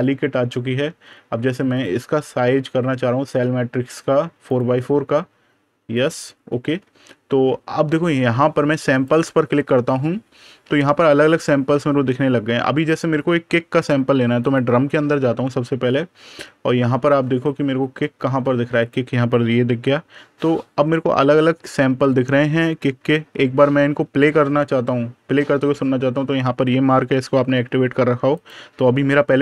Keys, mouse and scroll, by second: 0.6 super+KP_Add, 1.6 click, 6.7 super+KP_Subtract, 7.9 super+KP_Add, 8.8 click, 10.8-11.2 scroll down 1, 14.3 click, 18.6 click, 20.1 super+KP_Subtract, 21.0 super+KP_Add, 21.7 scroll down 1, 22.4-23.9 scroll up 1, 28.2 click.